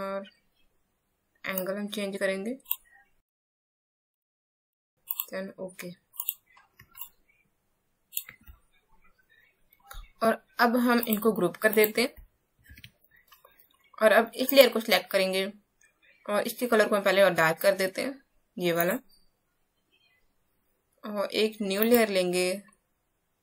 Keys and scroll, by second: 6.8 space.